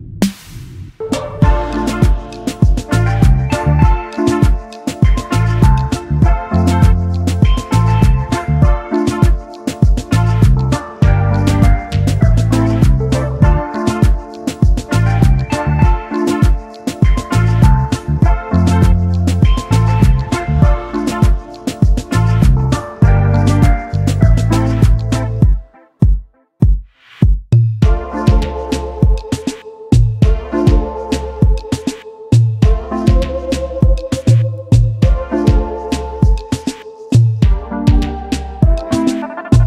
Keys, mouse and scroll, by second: 1.1 double click, 1.8 alt+click, 3.0 alt+scroll up 1, 5.6 double click, 7.0 right click, 8.4-8.9 alt+scroll up 1, 9.6 typing, 11.4-12.0 alt+scroll down 1, 12.2 typing, 13.6 double click, 13.7 space, 13.8 double click, 15.7 typing, 17.3 typing, 17.4 alt+scroll down 1, 17.5-17.9 alt+scroll up 1, 18.2 alt+scroll down 1, 18.8 alt+scroll down 1, 20.1 shift+click, 23.5 double click, 24.7 shift+click, 29.7-30.5 alt+scroll up 1, 31.5 shift+click, 32.0 space, 32.6 space, 35.1 shift+click, 39.2 alt+scroll down 1.